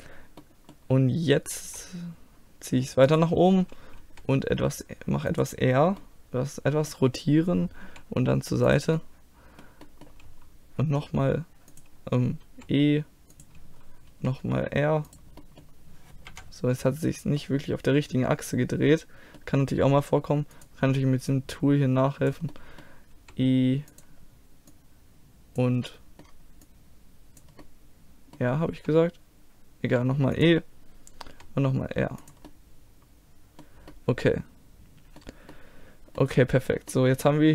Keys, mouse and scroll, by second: 1.6 e, 4.0 r, 6.0-7.9 middle drag, 7.9 g, 9.0 middle click, 10.0 middle click, 10.9 r, 12.5 e, 14.2 r, 15.4 middle click, 16.3 KP_1, 17.4-19.3 middle drag, 20.6-22.6 drag, 22.6 middle click, 23.2 e, 24.7-28.0 drag, 25.9-28.8 middle drag, 28.8 e, 31.3 r, 32.5-37.5 middle drag.